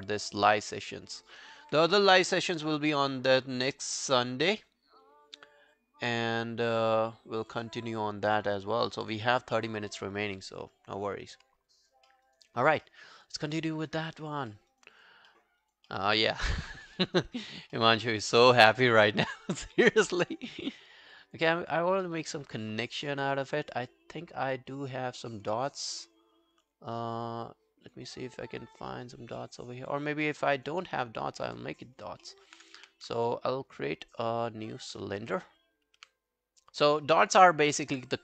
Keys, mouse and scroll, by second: 0.0 alt+click, 0.5 alt+middle click, 0.9 alt+scroll down 1, 1.2 alt+middle click, 1.4 alt+right click, 11.7 alt+click, 12.1 alt+middle click, 12.3 alt+right click, 12.5 alt+click, 12.9 alt+middle click, 13.1 alt+right click, 13.3 alt+click, 13.6 alt+middle click, 13.8 alt+right click, 14.2 alt+click, 14.5 alt+middle click, 14.7 alt+right click, 15.0 alt+click, 15.3 alt+middle click, 15.6 alt+right click, 15.9 alt+middle click, 16.2 alt+right click, 17.0 alt+middle click, 17.2 alt+right click, 17.5 alt+click, 17.8 alt+middle click, 18.0 alt+right click, 18.2 alt+click, 18.6 alt+middle click, 18.8 alt+right click, 19.0 alt+click, 19.3 alt+middle click, 19.6 alt+right click, 19.9 alt+middle click, 20.6 alt+middle click, 21.2 alt+click, 21.5 alt+middle click, 22.1 alt+middle click, 22.3 alt+right click, 22.6 alt+middle click, 23.4 alt+scroll down 1, 23.6 alt+click, 29.4 alt+middle click, 29.8 alt+scroll down 1, 29.9 alt+click, 30.3 alt+middle click, 30.5 alt+right click, 30.8 alt+middle click, 31.2 alt+scroll up 3, 31.4 alt+middle click, 31.8-32.4 alt+scroll down 8, 32.3 alt+middle click, 32.8 w, 33.2 shift+right click, 35.1 shift+right click, 35.1 scroll down 1, 35.2 w, 36.0 e, 37.5 alt+scroll up 1, 37.7 alt+middle click, 37.9 alt+right click.